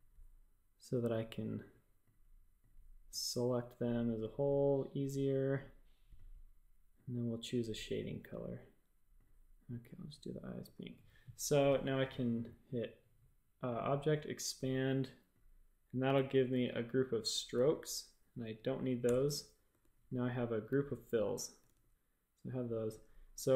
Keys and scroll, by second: 10.6 typing, 16.1 shift+super+a, 19.0 BackSpace, 19.6 a, 21.6 super+z.